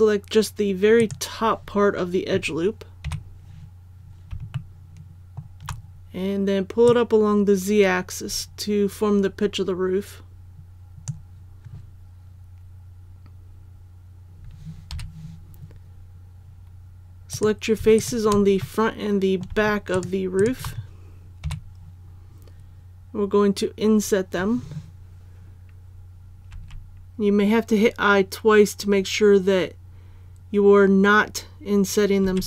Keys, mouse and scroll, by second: 3.1 KP_1, 4.5 shift+middle click, 6.8-11.4 drag, 14.9 3, 17.3 right click, 18.0 shift+right click, 18.6 middle click, 19.9 shift+right click, 20.4 shift+right click, 21.4 KP_1, 23.3-23.8 scroll up 1, 26.5 i.